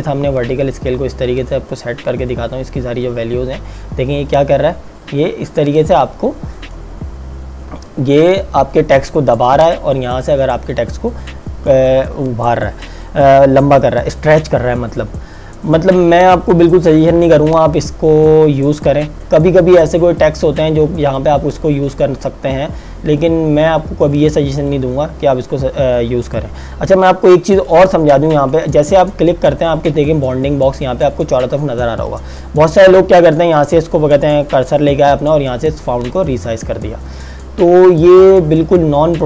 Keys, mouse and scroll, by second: 16.9 click, 21.3 click, 24.7 click, 35.2 click.